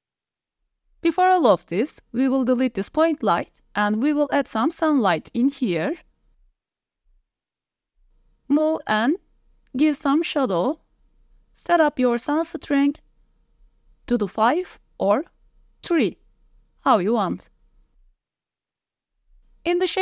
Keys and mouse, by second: 0.0 middle click, 0.5 ctrl+s, 0.7 middle click, 1.2 shift+middle drag, 1.4-1.7 middle drag, 2.2 click, 2.5 x, 2.8 drag, 3.4 shift+drag, 4.0 shift+a, 7.3 click, 8.0-10.0 typing, 8.5 drag, 11.1 middle click, 11.3-12.9 typing, 12.7 click.